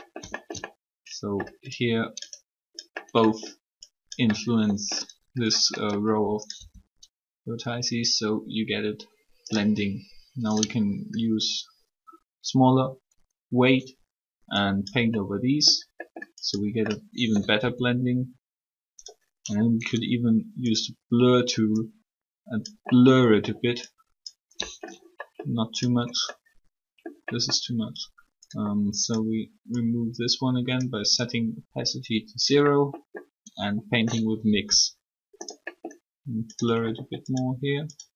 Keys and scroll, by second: 6.5 r, 17.6 r, 34.5 r.